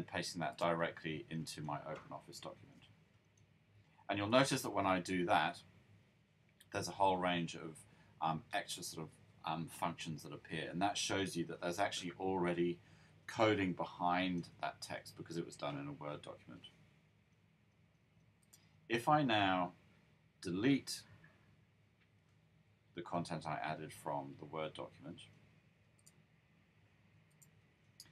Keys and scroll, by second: 2.5 super+v.